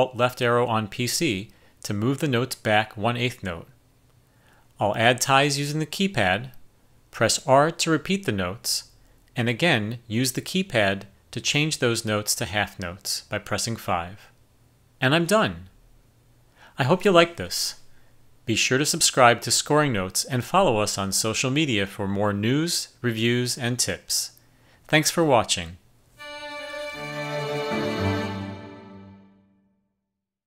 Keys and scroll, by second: 5.2 KP_Enter, 8.4 r, 12.4 5, 19.8-20.5 typing, 25.8 typing.